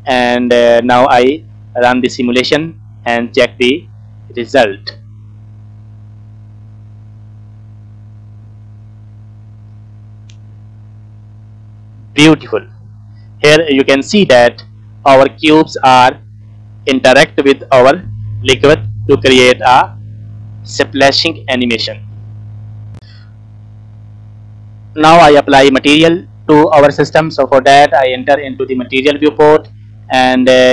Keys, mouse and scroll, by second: 0.4 scroll up 2, 1.0 scroll down 2, 1.3-2.9 middle drag, 3.1-3.6 scroll up 1, 4.3 space, 22.4 space, 23.0 click, 28.4 click, 30.4-30.7 scroll down 14.